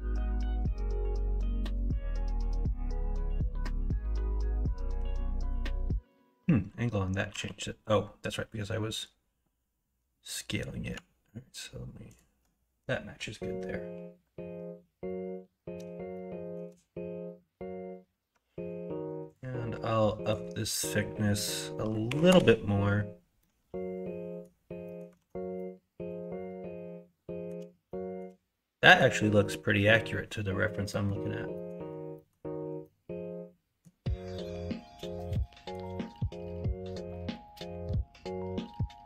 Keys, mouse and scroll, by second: 2.0-2.3 shift+middle drag, 4.1 Tab, 4.9 Tab, 7.3 r, 16.1 shift+middle click, 23.4-24.4 middle drag, 24.8 middle click, 25.1 alt+z, 25.6-27.4 middle drag, 27.8 shift+middle click, 28.7 middle click, 29.7 middle click, 36.9 middle click, 37.4 shift+middle click, 37.8 shift+middle click, 38.1 middle click, 38.6 shift+middle click.